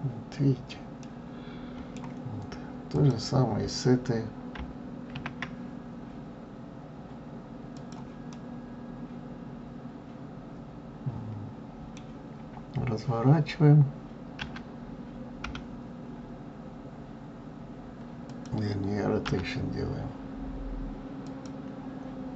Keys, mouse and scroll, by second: 0.0 scroll up 2, 0.5-1.0 scroll down 2, 1.0-2.9 middle drag, 2.9 click, 5.1 shift+d, 8.3-11.3 middle drag.